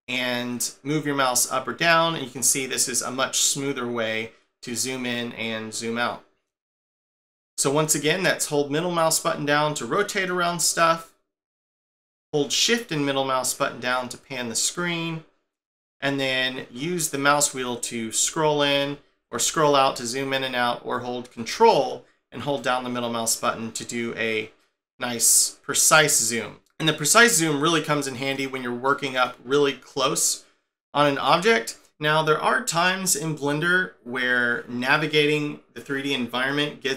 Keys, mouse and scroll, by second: 8.4 middle click, 10.7 click, 11.0 middle click, 17.5-18.3 scroll up 9, 18.7-19.7 scroll down 19, 19.7-22.4 scroll up 7, 22.6 ctrl+middle click, 28.3 middle click.